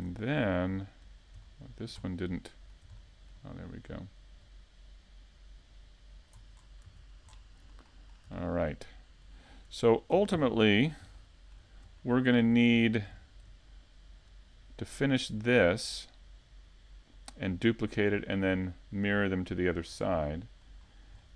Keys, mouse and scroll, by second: 1.2 click, 2.8 KP_5, 3.3 z, 4.5 z, 4.8 middle click, 7.4 KP_5, 8.3 KP_3, 8.8 KP_5, 9.2 z, 9.6 scroll up 1, 9.9 shift+middle click, 11.6 click, 13.3-14.0 scroll down 3, 13.7 z, 14.7 KP_5, 15.2 middle click.